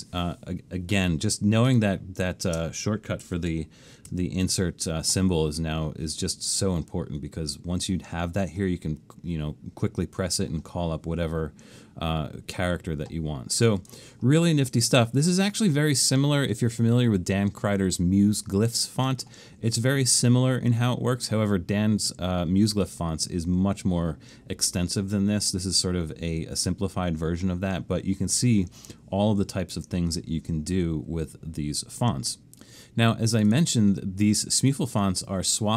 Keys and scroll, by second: 2.5 space, 4.1 alt+shift+super+s.